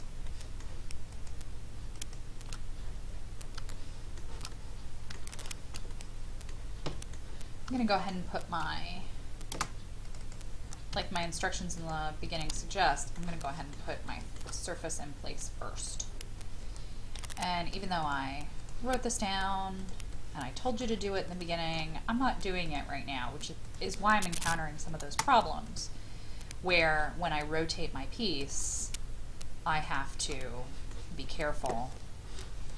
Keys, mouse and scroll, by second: 0.3 shift+middle click, 1.1 shift+click, 1.9 shift+click, 2.4-3.6 shift+scroll down 2, 3.7 shift+middle click, 4.5 middle click, 7.3 scroll down 1, 7.8 shift+middle click, 8.4 shift+middle click, 8.8-9.5 scroll up 1, 10.0-11.3 drag, 10.9 m, 11.7 click, 12.7 shift+middle click, 13.4 shift+middle click, 14.0 shift+middle click, 15.8 click, 16.4-17.1 scroll up 1, 17.1-18.0 scroll up 1, 18.0 click, 20.1 middle click, 21.3 shift+middle click, 22.7 click, 24.5 Escape, 25.7 click, 26.7 shift+click, 28.5 shift+click, 30.4 middle click, 31.2-32.7 scroll up 1.